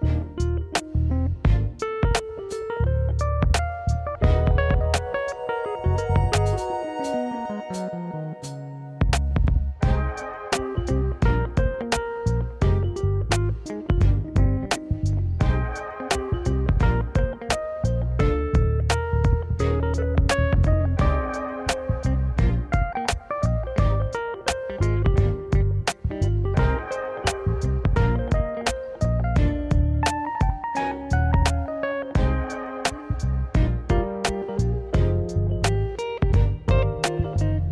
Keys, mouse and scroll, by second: 0.1 r, 1.5 g, 2.4 drag, 2.6-4.6 middle drag, 4.7 click, 5.0-8.1 middle drag, 8.7-10.2 middle drag, 10.3-11.2 middle drag, 11.2-11.5 drag, 12.3 `, 13.0 r, 14.4 g, 15.4 click, 15.6 middle click, 16.7 click, 17.0-18.1 middle drag, 18.1 click, 18.3 middle click, 18.5 click, 18.6-19.1 middle drag, 19.1 click, 19.6 `, 20.1-20.8 scroll up 2, 20.8-21.8 shift+middle drag, 21.9 alt+d, 26.9 shift+r, 27.2 shift+r, 27.9 drag, 28.2 click, 28.4-29.9 middle drag, 29.9 click, 30.1-31.4 middle drag, 33.5-34.4 shift+middle drag, 34.4 r, 35.0 drag, 35.2-36.4 middle drag, 36.4 click, 36.6 middle click.